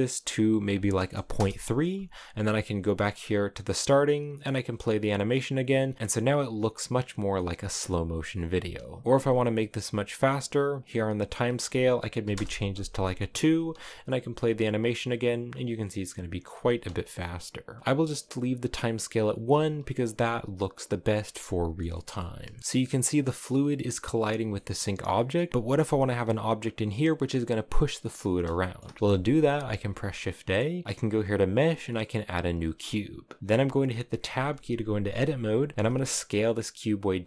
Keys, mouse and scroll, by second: 1.1 click, 3.8-5.9 drag, 6.6-8.7 middle drag, 8.7 space, 12.1-13.5 drag, 13.5 space, 15.7-19.2 middle drag, 19.2 click, 21.1-22.6 middle drag, 22.6-23.7 scroll down 1, 24.5 shift+middle click, 24.8 scroll up 1, 25.1 middle click, 25.5 space, 25.8 space, 28.1 space, 28.3-31.8 shift+middle drag, 31.8 shift+a, 32.5-33.8 scroll down 3, 33.8 Tab, 35.7 s.